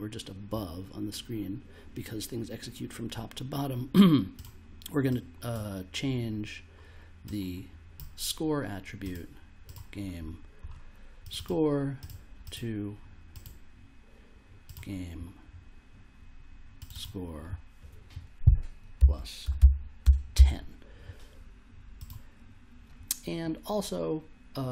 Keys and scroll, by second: 18.7-20.3 typing.